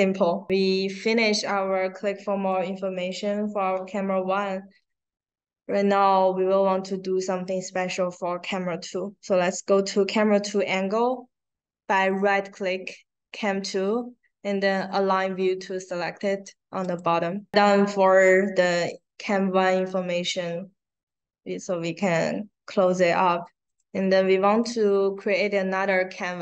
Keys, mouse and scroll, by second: 0.6-0.9 scroll down 2, 2.4 click, 5.8 click, 6.6 right click, 12.1 right click, 16.8 click, 18.7 click, 19.7 click, 23.6 right click, 24.4 click, 25.0 right click.